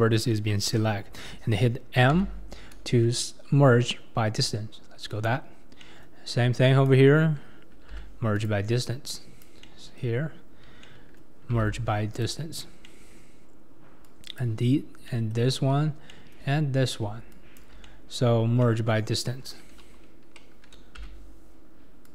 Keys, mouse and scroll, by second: 2.2 m, 3.0 click, 3.0-5.0 middle drag, 3.0 right click, 6.9 click, 8.0 m, 9.4 click, 9.6-11.6 middle drag, 11.6 m, 14.4 click, 15.1 middle click, 15.5-16.1 scroll up 3, 16.1-17.3 middle drag, 17.3 shift+click, 17.9 middle click, 18.4 scroll down 1, 18.6-21.0 middle drag, 21.0 m.